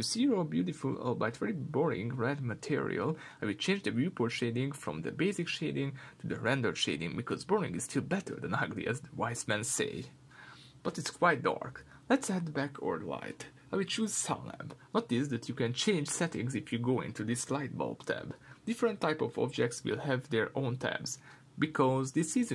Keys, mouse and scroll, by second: 1.2-15.6 middle drag, 2.6-3.0 scroll up 2, 3.7 scroll down 1, 15.6 click, 17.4-22.5 middle drag, 19.6 shift+a.